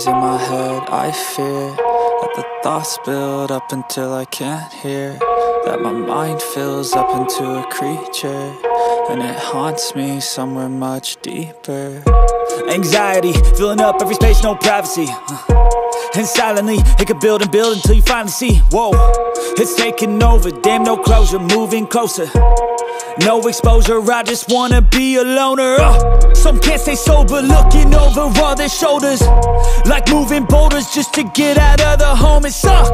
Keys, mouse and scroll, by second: 6.4 ctrl+d, 8.2 click, 13.9 alt+click, 17.2 alt+click, 21.4 click, 22.0 click, 24.0 click, 26.8 click, 30.1 click, 32.6 click.